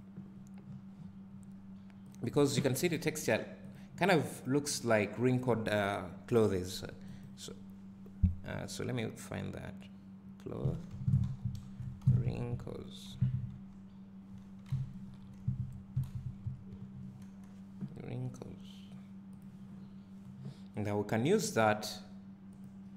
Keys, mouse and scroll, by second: 0.0 click.